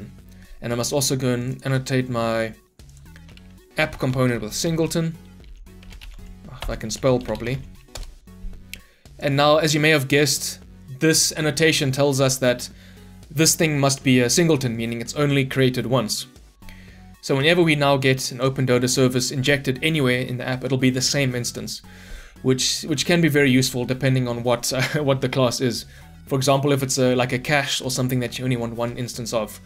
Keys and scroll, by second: 6.6 ctrl+BackSpace, 7.9 Return, 23.7 shift+F10.